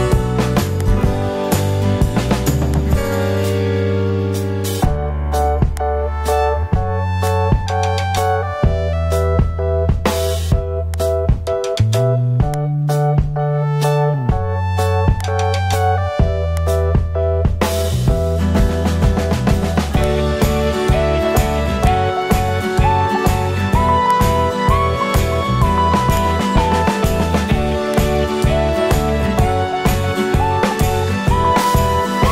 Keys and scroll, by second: 0.1 super+t.